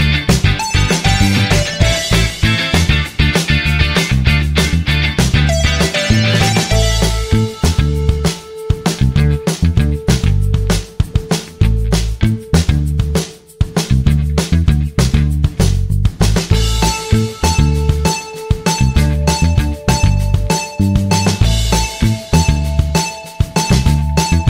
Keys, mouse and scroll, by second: 2.1 typing, 4.3 typing, 15.4-16.3 typing.